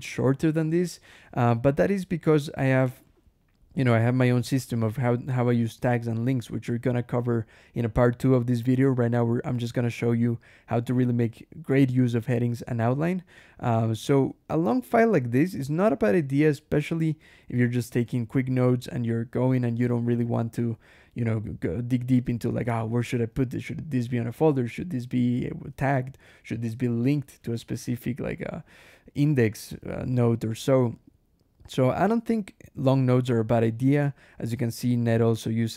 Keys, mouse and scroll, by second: 1.3 scroll down 1, 2.4-3.1 scroll up 2, 5.3 scroll up 1, 5.9 click, 6.6 Escape, 6.8 k, 8.6 Escape, 8.8 k, 9.0 j, 10.9 click, 13.3 click, 13.6-14.6 typing, 16.9 k, 18.0 j, 19.6 k, 23.2 k, 24.2-25.1 typing, 26.4 j, 27.2 k, 29.6 Escape, 30.0 j, 33.1 scroll down 1, 33.9 click, 34.6 ctrl+e, 35.5-35.7 scroll down 17.